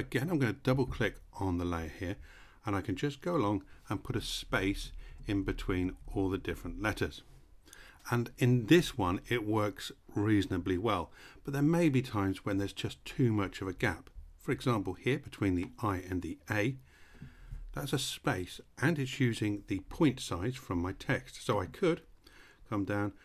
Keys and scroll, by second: 3.7-5.9 typing, 4.0 Right, 4.4 Right, 4.8 Right, 5.1 Right, 5.5 Right, 5.8 Right, 6.2 Right.